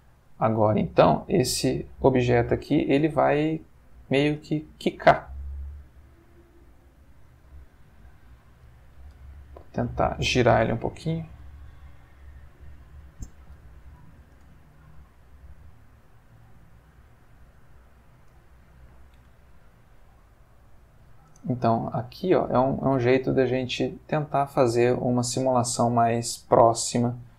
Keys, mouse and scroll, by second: 2.4 Escape, 3.1-4.3 ctrl+middle drag, 4.3 space, 7.3 Escape, 7.8-8.8 middle drag, 9.2 r, 9.9 Escape, 11.0 ., 12.4 click, 13.5 r, 13.9 click, 14.3 space, 18.2 Escape, 20.0 click, 21.3 space, 26.7-27.3 drag.